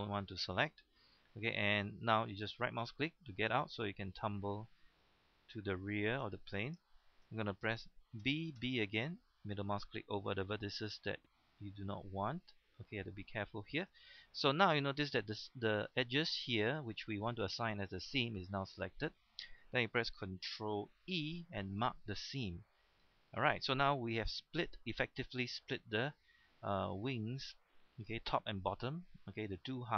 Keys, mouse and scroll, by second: 2.7 right click, 3.7-5.4 middle drag, 6.4-6.8 scroll up 1, 6.8 shift+middle click, 8.2 b, 8.6 b, 9.6-13.8 middle drag, 13.8 right click, 14.2-14.8 scroll up 1, 14.9-15.8 scroll down 1, 16.0 shift+middle click, 16.5 scroll down 1, 16.7 middle click, 17.6 scroll up 1, 17.8 shift+middle click, 18.5 scroll up 1, 18.9 shift+middle click, 21.1 ctrl+e, 21.7 click, 22.1 scroll down 1, 22.3 middle click, 23.0 scroll down 1, 23.6-24.1 scroll up 1, 24.1-29.9 middle drag.